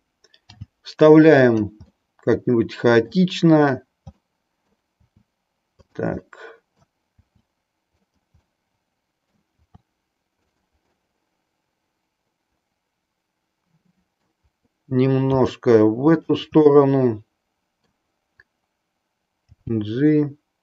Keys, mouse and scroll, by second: 0.6 g, 2.0-3.3 middle drag, 4.3 middle click, 5.1 r, 5.9 click, 6.2-7.0 middle drag, 7.1 r, 8.5 middle click, 10.9-14.1 middle drag, 15.2 r, 16.1 click, 16.6-18.1 middle drag, 19.5 g.